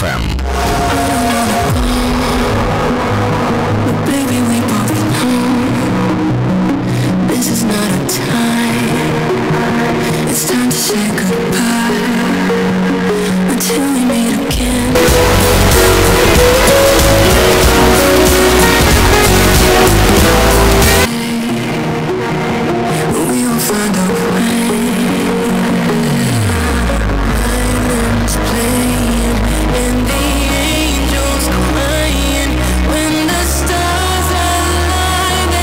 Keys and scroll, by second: 21.0 Page_Down.